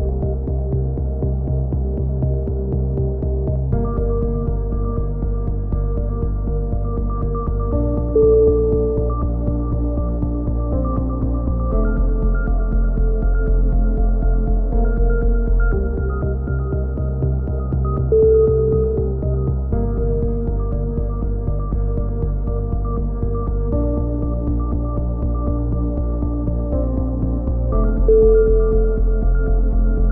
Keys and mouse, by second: 0.4 click, 0.8 z, 2.9 middle click, 4.4 z, 5.5 click, 7.1-9.3 middle drag, 9.3-10.3 drag, 9.5 z, 9.8 right click, 10.3 KP_7, 11.4 middle click, 11.7 z, 12.0 middle click, 12.0 z, 14.3 z, 15.0 click, 16.1-17.3 drag, 17.6 z, 17.9 z, 18.3 middle click, 18.3 a, 18.5 click, 19.5 KP_7, 19.9 z, 20.3 click, 21.7-22.7 middle drag, 22.5 z, 22.7-23.7 drag, 23.7 right click, 24.0 KP_7, 24.4 z, 24.8-26.3 drag, 26.9-28.1 drag, 29.1 a, 29.4 middle click.